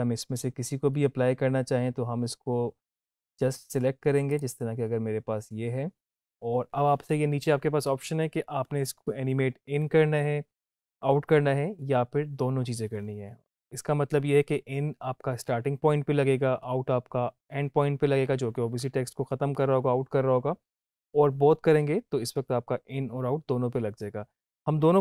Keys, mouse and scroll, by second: 0.9-2.7 scroll up 1, 4.3 click.